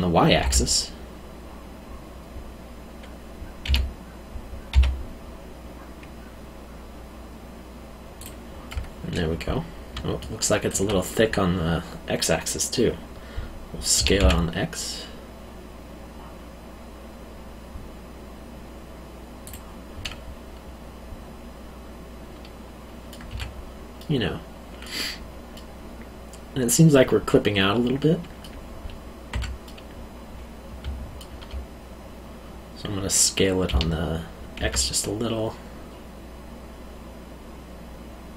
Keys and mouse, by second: 0.4 y, 3.6 s, 4.7 y, 8.2 click, 8.7 middle click, 9.9 alt+middle click, 13.9 s, 14.2 x, 19.4 click, 20.0 middle click, 23.3 Tab, 23.9 middle click, 29.3 Tab, 29.6 middle click, 30.8 alt+middle click, 33.7 s, 34.6 x.